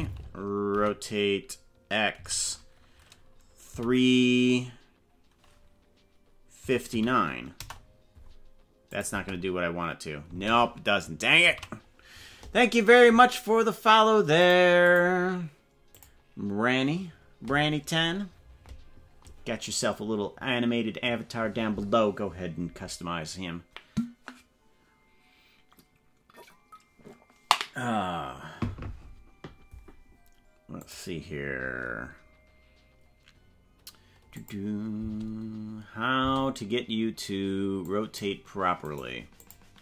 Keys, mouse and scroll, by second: 0.7 r, 8.9 click, 9.1 space, 10.4 space, 11.6 ctrl+z, 30.8 click, 34.3 click, 34.9 space, 36.3 space, 37.8 click, 38.8 right click, 39.4 click.